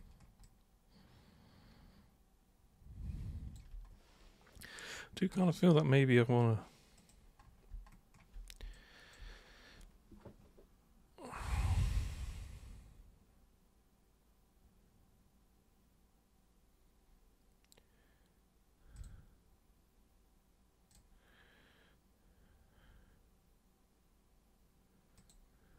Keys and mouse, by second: 0.4-3.5 alt+super+drag, 7.0 super+click, 8.7 alt+super+click, 18.9 super+click, 20.9 super+click, 25.1 super+click.